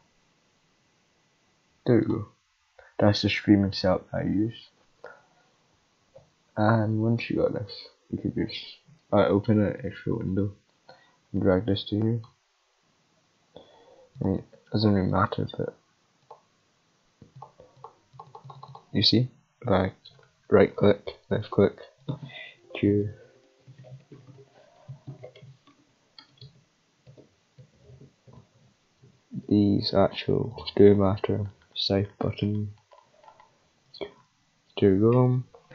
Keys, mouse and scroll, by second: 2.0 click, 9.9 Tab, 10.9-12.2 drag, 14.1 click, 16.2 click, 18.1 click, 18.4 click, 20.1 click, 20.4 click, 20.9 click, 21.1-22.0 right drag, 22.0 click, 22.2-25.8 typing, 27.9 Caps_Lock, 28.3 Caps_Lock, 28.6 Caps_Lock, 29.0 Caps_Lock, 29.3 Caps_Lock, 30.5 click, 30.9-31.5 middle drag, 33.8 middle click.